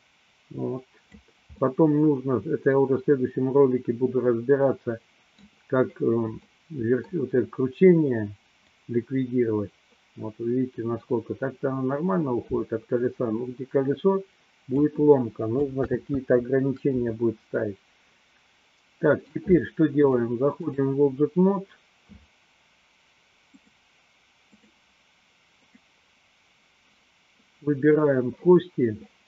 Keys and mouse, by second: 1.8-5.7 middle drag, 6.6 middle click, 8.6-14.9 drag, 15.8 ctrl+z, 17.7-19.4 middle drag, 20.2 click, 23.5 click, 26.1 click.